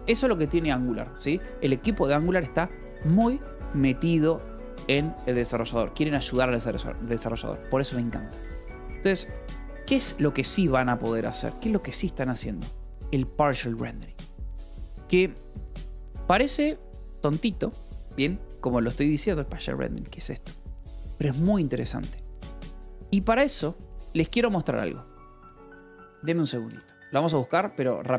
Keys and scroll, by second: 8.5-10.3 typing, 9.2 Escape, 23.0 Escape, 25.1 y, 25.7 e, 25.7 space, 26.5 Return.